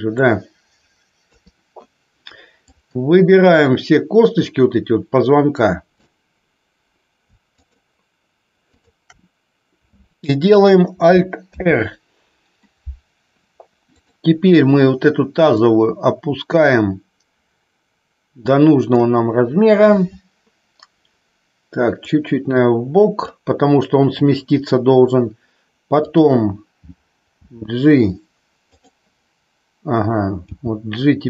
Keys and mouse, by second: 1.2 KP_3, 2.8-6.0 drag, 7.5 shift+click, 8.6 shift+click, 11.4 alt+r, 14.0 click, 15.6-19.0 drag, 22.0-23.1 drag, 26.0 click, 27.4 g, 28.6 click, 30.5 g.